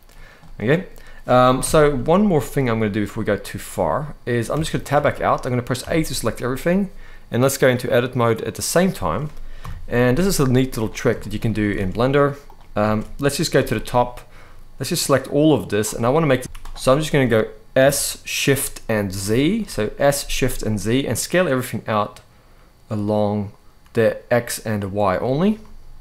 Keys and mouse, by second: 0.1 middle click, 1.3 KP_7, 3.0 middle click, 4.2 Tab, 4.7 shift+middle click, 5.5 a, 7.5 click, 9.3 KP_7, 10.9 shift+middle click, 11.2 z, 12.5 alt+a, 13.2 c, 16.3 s, 16.4 z, 16.6 middle click, 17.5 s, 18.0 s, 18.1 s, 18.9 shift+z, 24.7 click, 25.3-26.0 middle drag.